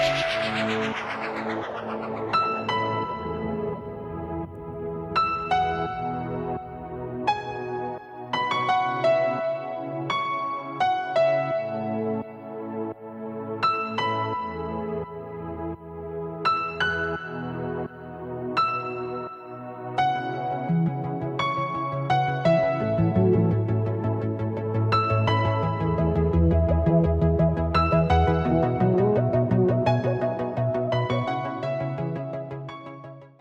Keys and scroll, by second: 0.5 super+space, 0.6-1.2 typing, 1.3 super+space, 1.3 super+space, 1.4 super+space, 1.5 super+space, 1.9 super+space, 2.4 super+space, 2.5-4.3 typing, 2.9 super+space, 4.9 alt+super+space, 4.9 alt+super+space, 5.0-5.6 alt+super+space, 5.7 alt+super+space, 11.0-12.3 typing, 11.5 super+space, 11.6 super+space, 11.7 super+space, 11.8 super+space, 11.9 super+space, 14.9-15.8 space, 17.6-19.6 typing, 18.7 super+space, 20.7 alt+super+space, 21.4-23.1 typing, 24.5 space, 25.0 alt+super+space, 25.1 alt+super+space, 25.2 alt+super+space, 25.3 alt+super+space, 25.5 alt+super+space, 25.7 alt+super+space, 29.7-32.3 typing.